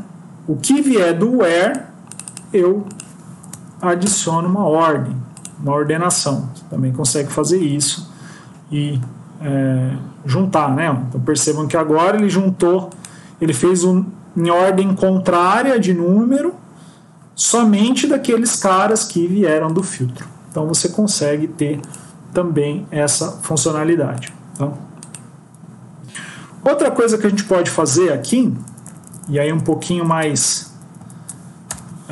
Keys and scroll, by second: 27.4 ctrl+Down, 28.6 Left, 28.7 Left, 30.1 shift+Down, 31.6 BackSpace.